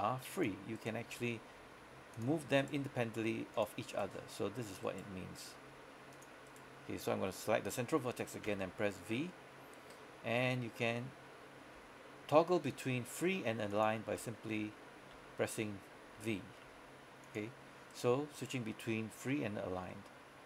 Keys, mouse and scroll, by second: 0.4 click, 0.9 right click, 1.1 g, 2.2 click, 2.7 right click, 2.9 g, 3.6 click, 4.0 right click, 4.3 g, 5.8 g, 6.2 click, 6.5 right click, 8.6 v, 13.8 click, 14.3-16.7 typing, 17.3 click, 18.0 right click, 19.9 g.